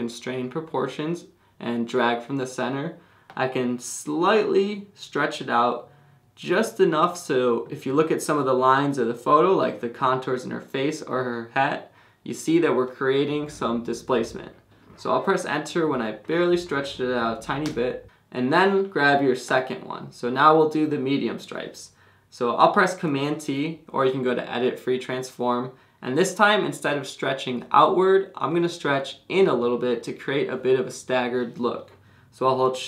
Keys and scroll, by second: 17.6 Return, 23.4 super+t.